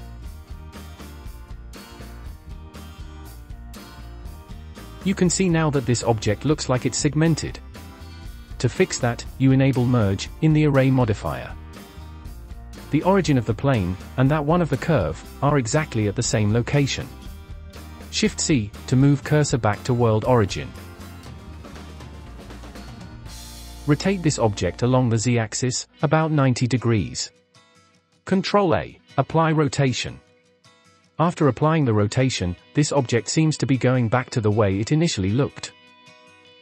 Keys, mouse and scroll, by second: 0.8-2.0 drag, 2.9 click, 3.3 scroll down 5, 3.5 shift+middle click, 3.8-5.1 scroll up 4, 5.1-7.5 drag, 7.5-8.3 scroll up 4, 8.3 click, 9.4-10.6 drag, 11.5-11.8 scroll down 5, 11.8-12.9 scroll up 4, 14.5 click, 18.2 shift+c, 19.4-20.3 scroll up 8, 20.3-22.7 shift+middle drag, 22.9 n, 23.7 click, 24.6-27.2 drag, 27.2 scroll down 1, 27.3-28.3 shift+middle drag, 28.3 ctrl+a.